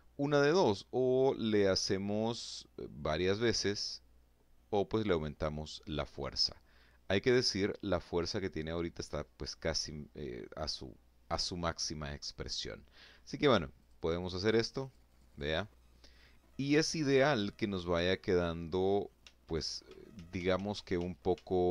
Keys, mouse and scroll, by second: 12.2 click, 13.2 click, 17.6 ctrl+z, 18.5 ctrl+z.